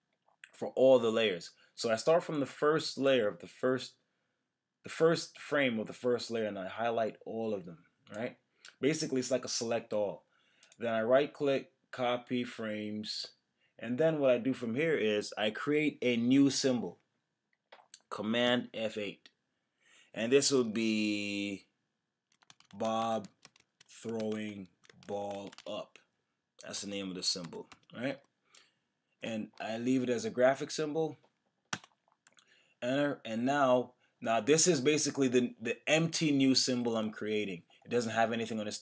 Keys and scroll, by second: 18.5 super+F8, 31.7 Return.